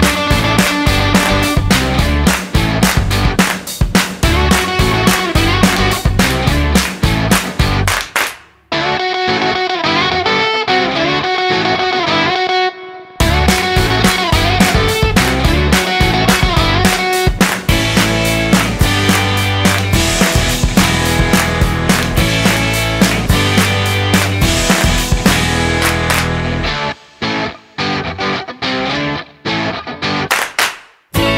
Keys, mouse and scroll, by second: 2.0 middle click, 2.8 shift+middle click, 4.1 shift+a, 10.8 click, 14.6 click, 17.7 click, 20.2 click, 24.0 click, 29.8 click.